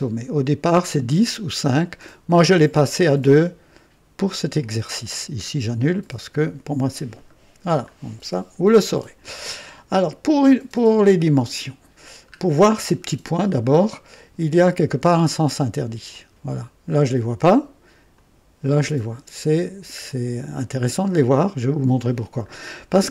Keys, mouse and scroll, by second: 5.7 click, 7.3-7.7 scroll down 2, 10.3-10.8 scroll down 1, 11.1-12.0 right drag, 12.1 scroll down 1, 16.0 click, 18.1 click, 19.9-20.3 scroll up 2, 20.8 scroll up 2, 22.0-23.1 scroll down 2.